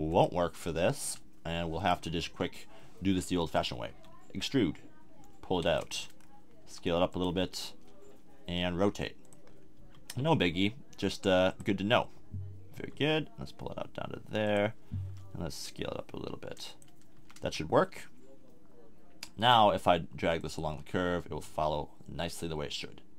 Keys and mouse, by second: 0.1 click, 0.7 click, 1.0 Tab, 1.8 middle click, 2.2 KP_1, 3.9 e, 5.9 click, 6.6 s, 7.1-8.6 drag, 8.6 z, 8.6 r, 9.5 middle click, 9.8 g, 11.6 click, 11.8 middle click, 12.7 g, 15.1 s, 17.2 a, 17.4 Tab.